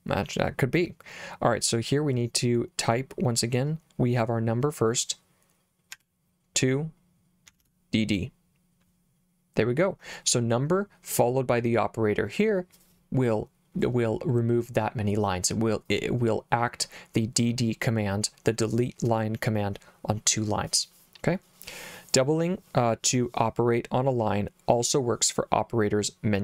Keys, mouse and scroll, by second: 6.0 2, 7.5 d, 7.6 d.